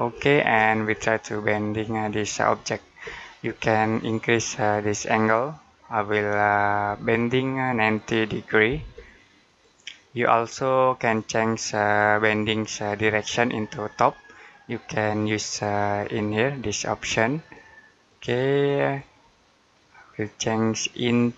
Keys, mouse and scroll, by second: 0.0-0.4 scroll up 1, 1.1 middle click, 4.5 click, 8.6 typing, 9.3 click, 11.2 middle click, 16.4 click.